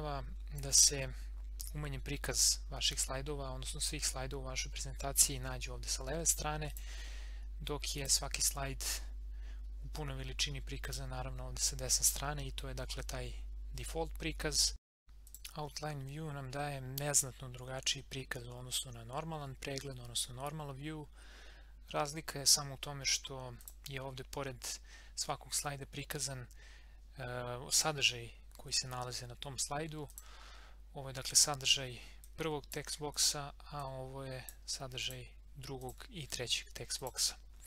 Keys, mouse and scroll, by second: 2.8 scroll down 1, 4.7 scroll up 1, 5.9 scroll down 1, 6.7 click, 7.2 scroll up 1, 8.0 click, 10.8 click, 15.3 click, 23.6 click, 30.1-35.0 drag.